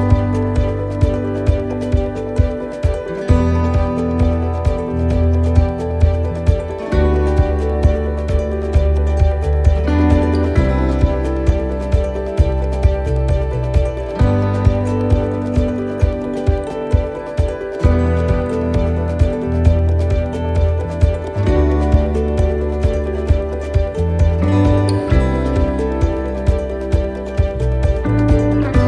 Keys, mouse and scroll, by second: 0.4 middle click, 0.7-1.1 scroll down 1, 1.6 click, 3.0 middle click, 5.9 middle click, 5.9-6.2 scroll up 1, 6.2 middle click, 7.8 right click, 8.9 click, 10.8 click, 16.2 middle click, 16.2 scroll up 1, 16.7 scroll down 1, 18.4 l, 18.8 middle click, 20.0 shift+d, 21.2 click, 24.1 middle click.